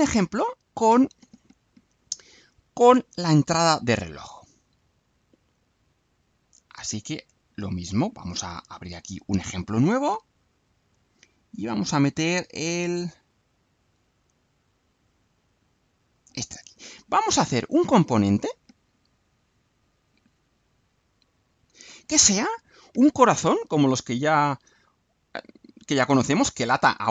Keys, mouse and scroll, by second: 3.5 click, 5.4 click, 6.4 click, 16.1 click, 18.5-21.9 drag.